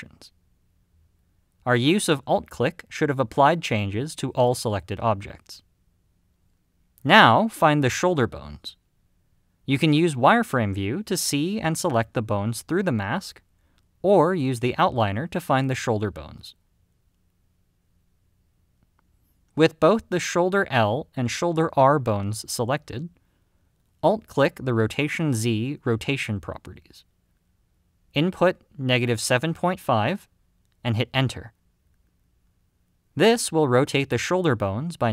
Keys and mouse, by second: 0.3 click, 3.0 click, 4.2 click, 5.4 click, 10.2 click, 12.2 click, 17.3 KP_Decimal, 18.7 middle click, 26.2-35.1 alt+drag.